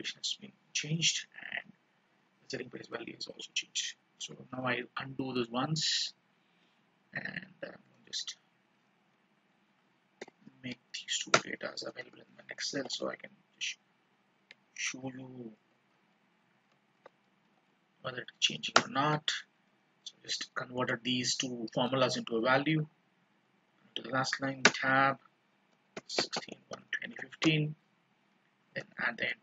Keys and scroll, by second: 4.6 ctrl+z, 12.5 ctrl+d, 14.6 ctrl+z, 15.7 ctrl+r, 17.1 ctrl+c, 17.6 alt+e, 17.9 alt+s, 18.4 alt+v, 20.9 ctrl+shift+-, 23.6 ctrl+Down, 28.7 ctrl+shift+-.